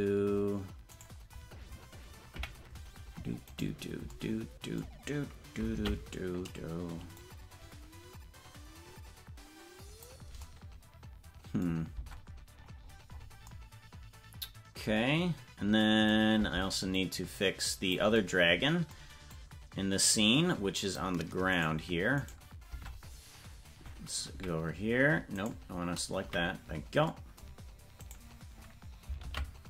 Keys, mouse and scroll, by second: 0.9-2.3 right drag, 2.3 KP_Decimal, 3.4 right click, 5.7 ctrl+l, 7.2-10.0 drag, 12.0 Tab, 12.5-13.5 scroll down 19, 17.0-18.0 drag, 19.4-21.0 drag, 21.6 right click, 22.4 right click, 22.7 Tab, 24.3 KP_Decimal, 25.3 right click, 26.2 KP_Decimal, 28.0-29.2 right drag, 29.2 ctrl+l.